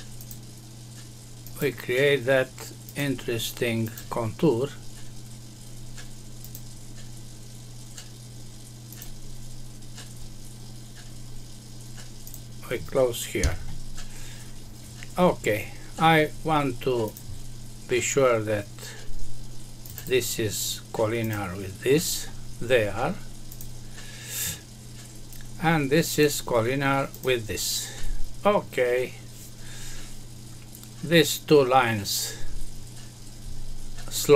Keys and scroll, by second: 13.4 Escape.